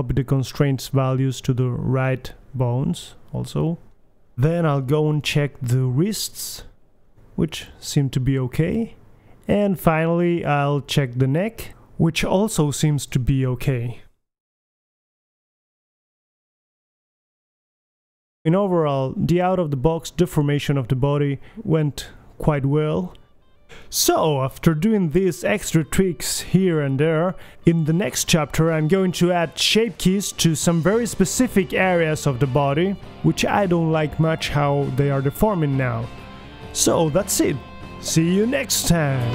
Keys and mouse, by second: 0.6 right click, 1.2 click, 2.3 KP_1, 4.2-4.9 right drag, 4.2 r, 4.9-5.3 middle drag, 6.7 right click, 6.9 right drag, 7.2 middle click, 7.9 KP_1, 8.3-9.3 middle drag, 9.3-10.2 right drag, 9.5 r, 11.4-12.5 right drag, 11.5 r, 13.6-14.5 right drag, 14.0 KP_3, 14.5 r, 17.0 middle click, 17.6 r, 18.0 right drag, 19.3 KP_1, 19.7 r, 21.7 r, 23.6-24.0 right drag.